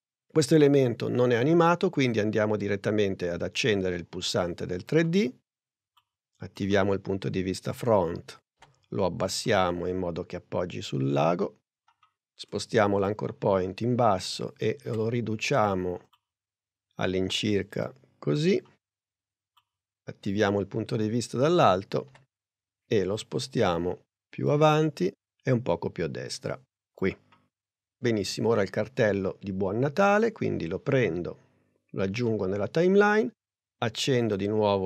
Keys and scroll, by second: 8.6 p, 14.9 s, 22.1 p.